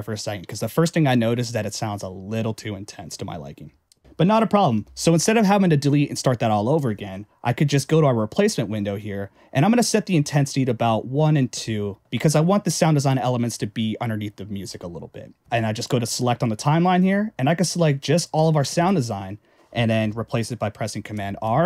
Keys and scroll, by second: 4.9 Return, 21.1 super+r.